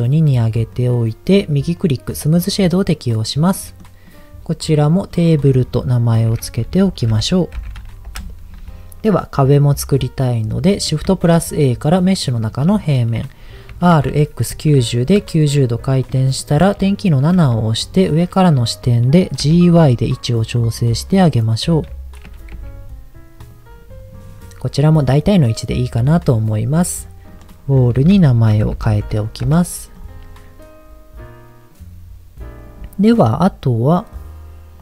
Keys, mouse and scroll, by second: 0.0 click, 0.7 middle click, 1.8-2.8 right drag, 3.1 click, 3.6 middle click, 4.0 click, 5.4-8.2 drag, 8.9-10.0 scroll down 2, 10.0 middle click, 11.0 shift+a, 12.8-13.2 scroll down 3, 13.7 r, 14.1 x, 14.5 KP_9, 14.7 KP_0, 15.1 KP_Enter, 16.7 shift+middle click, 17.3 KP_7, 18.2 scroll up 2, 19.4 g, 19.7 y, 20.8 click, 21.0-21.8 scroll up 3, 22.2 g, 22.5 y, 23.4 click, 23.7-24.6 scroll down 4, 25.4 middle click, 26.1-27.2 scroll down 2, 27.2 click, 27.4-29.5 drag, 28.9 l.